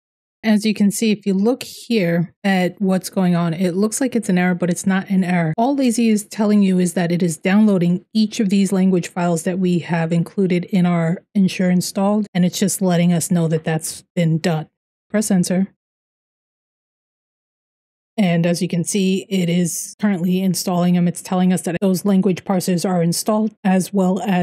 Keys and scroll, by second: 14.8 Return, 15.9 Return.